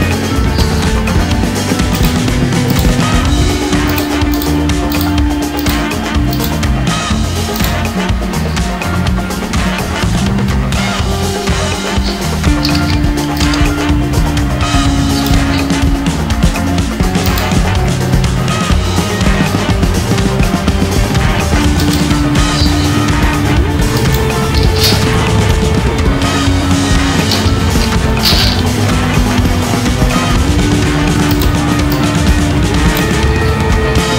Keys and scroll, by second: 12.3 ctrl+c, 13.4 ctrl+v, 25.5 ctrl+Home.